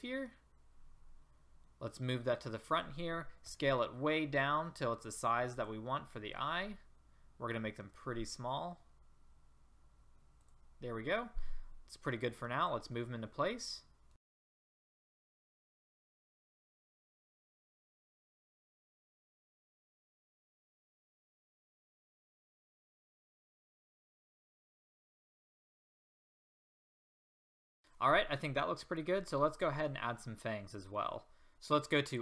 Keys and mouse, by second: 1.9-3.7 drag, 3.5 s, 6.7 s, 12.3-12.9 drag, 12.9-13.5 middle drag, 15.6-18.6 typing, 18.3-18.6 drag, 19.4 Delete, 20.2-20.5 drag, 21.0 click, 21.5 click, 23.8 middle click, 24.0 drag, 24.2 middle drag, 24.4 click, 24.6 shift+d, 26.1 shift+d, 26.4 click, 26.5 shift+d, 26.8 click, 27.1 click, 27.6 a, 31.5 ctrl+z.